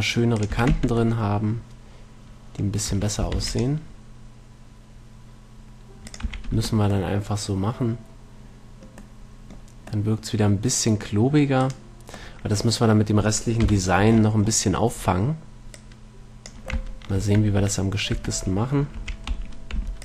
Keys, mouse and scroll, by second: 0.7-2.3 drag, 0.9 a, 1.0 Tab, 2.5 middle click, 3.2 Tab, 3.7 ctrl+r, 6.6 a, 7.0 Tab, 7.4 middle click, 8.2-9.3 middle drag, 9.5 middle click, 11.2 middle click, 11.9 right click, 13.5 middle click, 13.9 KP_1, 15.3 Tab, 16.0-17.8 drag, 18.0 Tab, 18.4 Tab, 19.3 a.